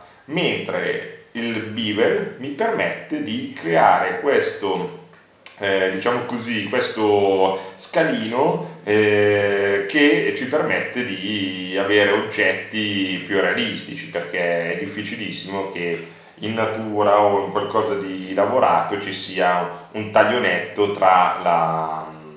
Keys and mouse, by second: 0.0-1.7 drag, 1.7 middle click, 4.5-5.7 middle drag, 6.8-10.1 drag, 10.3 middle click, 10.5 middle click.